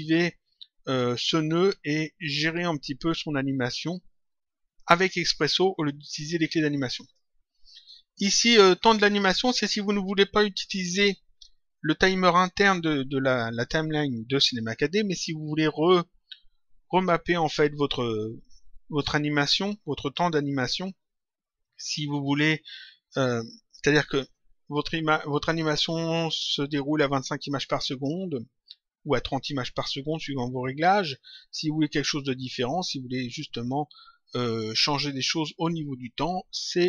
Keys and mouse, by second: 1.0 click, 6.8 click.